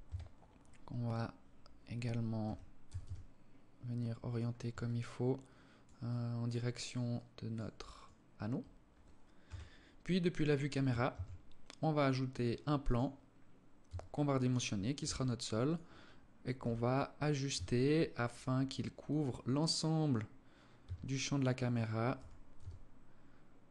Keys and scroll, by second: 1.8 r, 8.9 KP_0, 10.5 shift+a, 13.3 s, 14.5 s, 16.0 g, 20.3 s, 21.6 g.